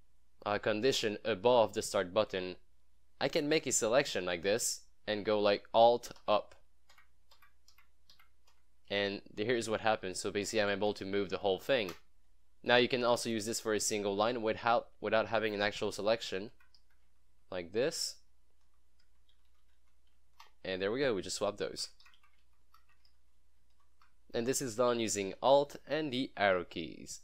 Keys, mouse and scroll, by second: 3.3-4.8 drag, 6.3 alt+Up, 9.1 alt+Down, 12.7 click, 14.6 click, 16.6 alt+Up, 17.1 alt+Down, 17.3 alt+Up, 19.3 Down, 21.9 alt+Up, 23.0 Up, 23.2 alt+Down, 25.0 Up, 25.4 ctrl+s.